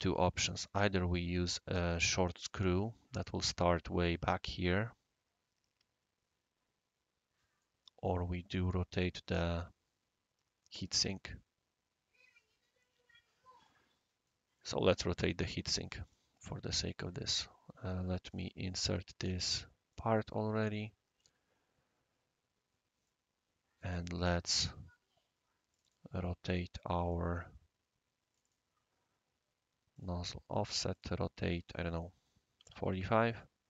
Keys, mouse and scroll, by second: 0.2 scroll up 1, 0.2 scroll down 1, 0.3-1.1 middle drag, 2.4-3.3 right drag, 7.6-8.1 right drag, 8.2 scroll down 2, 8.6-9.0 middle drag, 9.3-14.3 right drag, 16.0 click, 18.2 click, 18.8 click, 19.9 click, 23.0-24.0 right drag, 24.0-24.5 middle drag, 25.7 click, 27.0 click, 28.3 click, 28.4 click, 29.9 click, 30.9 click, 32.5 typing, 32.9 Tab.